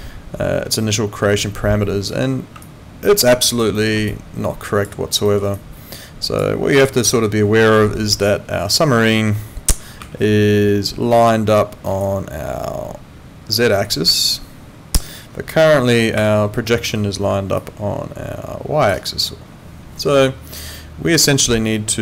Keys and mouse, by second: 2.6 alt+click, 3.3 alt+right click, 3.8 alt+middle click, 4.1 alt+click, 5.2 alt+middle click, 5.5 alt+click, 7.0 ctrl+2.